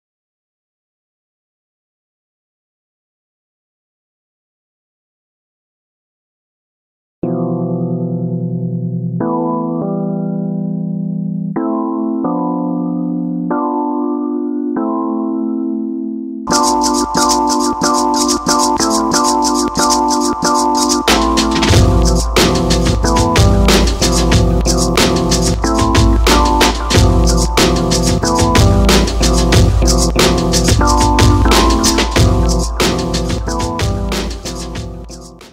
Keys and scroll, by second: 0.9 shift+c, 2.5 shift+g.